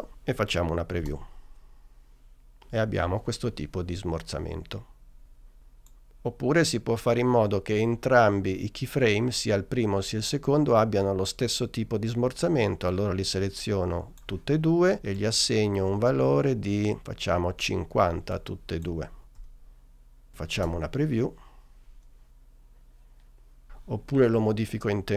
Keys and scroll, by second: 1.1 space, 17.8 5, 18.6 0, 19.3 Return, 20.6 space.